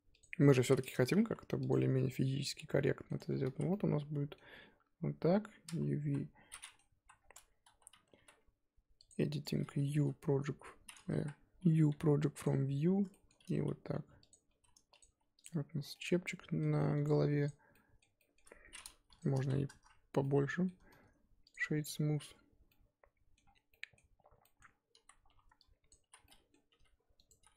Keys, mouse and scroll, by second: 0.2 click, 0.3 middle click, 0.6 z, 0.7 middle click, 1.1 g, 1.7-3.2 middle drag, 3.2 Tab, 3.3 scroll down 4, 3.4 z, 3.7-6.9 middle drag, 6.9 KP_1, 7.5 Tab, 7.6 a, 8.1 3, 9.0-11.1 drag, 11.1 KP_1, 12.4-15.0 typing, 15.4 Tab, 15.8 scroll down 1, 15.9-17.4 middle drag, 17.4 right click, 17.7-19.7 middle drag, 19.7 click, 20.2-21.4 middle drag, 21.4 click, 21.8 middle click, 22.3-22.7 scroll up 2, 22.7-24.2 middle drag, 24.2 Tab, 24.3-24.9 scroll up 3, 24.4 middle click, 24.9 z, 25.3 1, 25.9 click, 26.1 z, 26.2 middle click, 26.7 g.